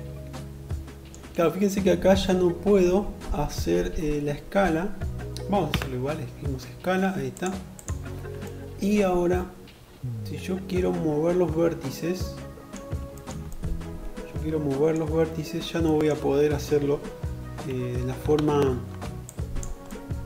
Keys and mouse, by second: 4.7 s, 6.4 middle click, 6.6 click, 6.8-10.2 middle drag, 10.2 click, 10.3 middle click, 11.1 click, 11.4-18.1 middle drag, 16.6 1, 17.3 alt+z, 18.1-20.2 drag.